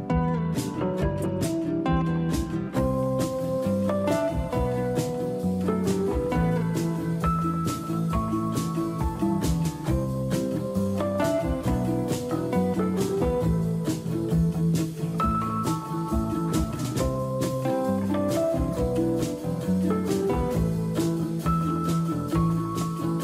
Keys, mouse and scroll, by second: 0.4-1.1 scroll down 1, 9.9 scroll up 6, 9.9 c, 21.4 shift+click.